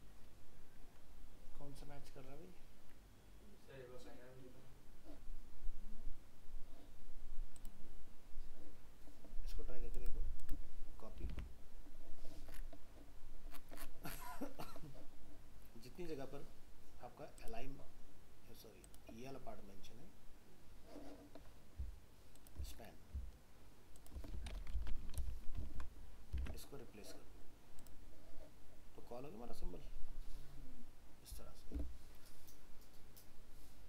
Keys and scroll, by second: 11.3 alt+Tab, 25.2 ctrl+v, 26.4 alt+Tab.